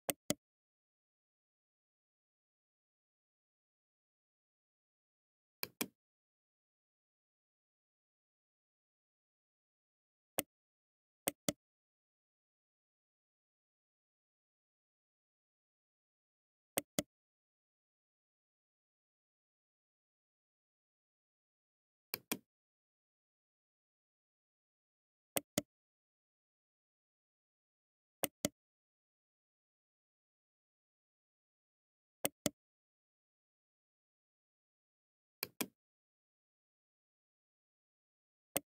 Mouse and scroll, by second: 5.4 click, 10.2 right click, 11.1 right click, 21.9 click, 25.2 right click, 28.0 right click, 35.3 click, 38.4 right click.